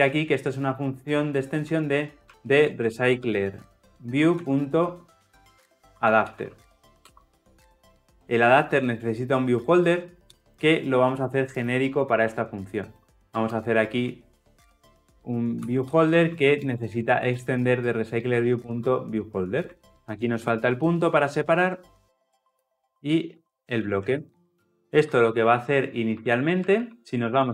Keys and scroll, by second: 18.2 Return, 19.7 ctrl+alt+l, 24.2 ctrl+alt+l, 24.3 ctrl+alt+o.